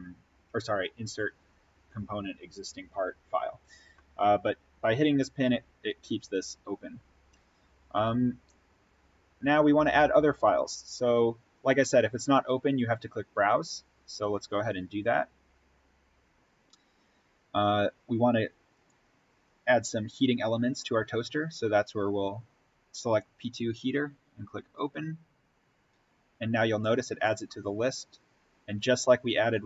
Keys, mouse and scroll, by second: 14.5 click, 18.6 click, 24.6 click.